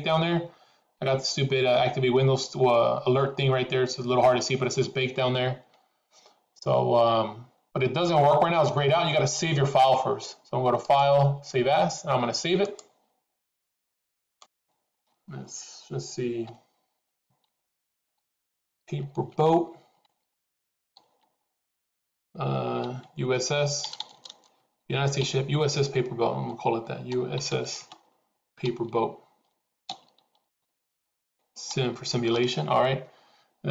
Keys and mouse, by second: 10.9-13.7 drag.